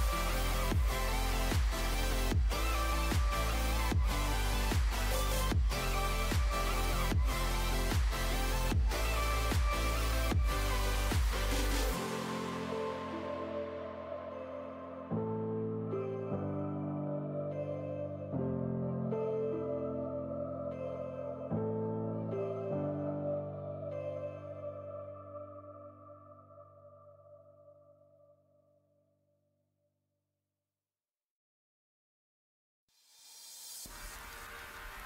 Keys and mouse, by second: 0.0 f, 4.9-7.2 drag, 6.1 x, 9.3-11.0 drag, 9.6 g, 11.9-15.0 drag, 14.1 f, 14.9 g, 18.3 f, 18.7 a, 23.0 g, 24.5 g, 27.4 z, 28.6 z, 29.4 e, 30.1-31.8 drag.